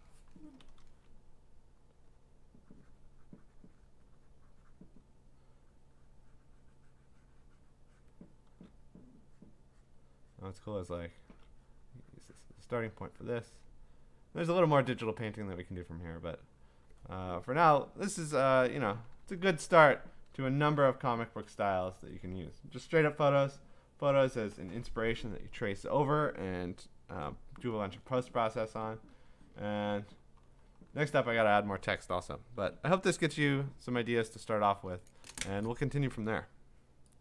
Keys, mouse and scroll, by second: 1.9 click, 2.2 click, 2.4 click, 3.9 click, 4.8 click, 5.7 click, 6.1 click, 6.4 click, 8.0 click, 8.5 [, 9.1 click, 9.5 click, 9.9 click, 10.8 click, 11.0 [, 11.3 [, 11.8 click, 11.9 click, 13.3 click, 16.6 click, 18.6-19.8 scroll, 20.0-20.6 scroll down 10, 20.6 scroll down 1, 20.8-23.3 scroll down 11, 29.6 scroll down 5, 29.8-32.0 scroll up 8, 33.3 scroll.